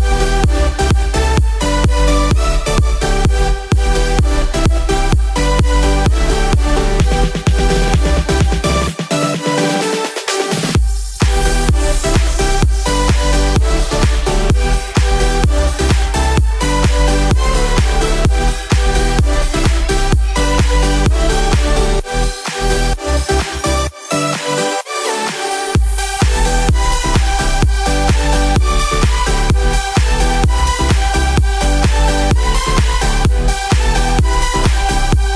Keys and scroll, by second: 6.6 ctrl+z.